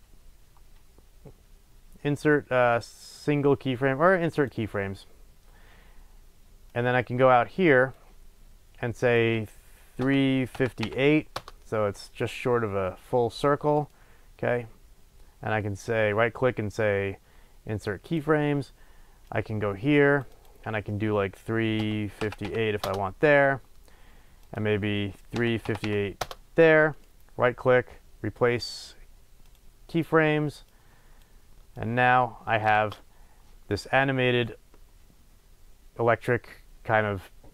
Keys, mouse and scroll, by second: 6.7-13.8 drag, 11.5 Return, 13.8-19.2 right drag, 19.2-27.0 drag, 22.9 Return, 26.3 Return, 27.0-30.8 right drag, 30.8 click, 31.8-37.5 drag, 32.7 space.